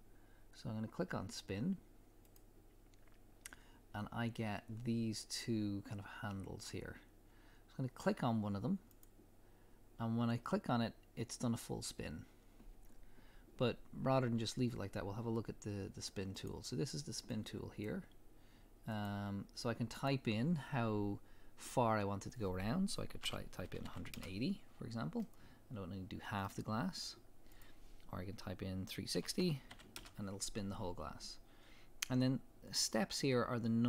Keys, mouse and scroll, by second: 1.1-2.2 middle drag, 2.2 click, 8.9-11.1 drag, 16.3 click, 17.3-19.1 drag, 19.9-25.2 drag, 24.2 Return, 25.2-27.5 middle drag, 27.5-33.8 drag, 30.0 Return.